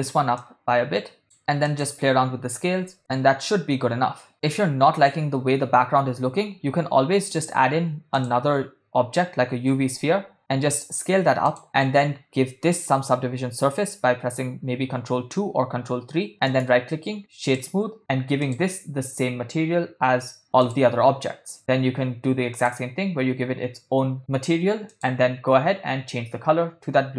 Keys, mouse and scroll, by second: 1.4 middle click, 1.7-3.0 drag, 3.0 ctrl+middle click, 3.6 middle click, 7.1 shift+a, 10.4 s, 13.3 ctrl+2, 17.0 right click, 18.4-21.1 drag, 23.4 click, 24.9 click.